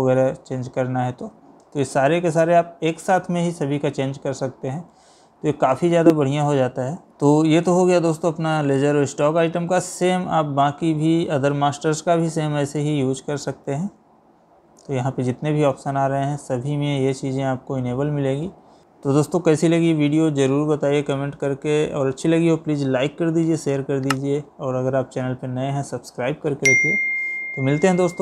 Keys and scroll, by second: 4.7 Escape, 12.4 Down, 13.8 Up, 16.0 Escape, 18.8 Escape.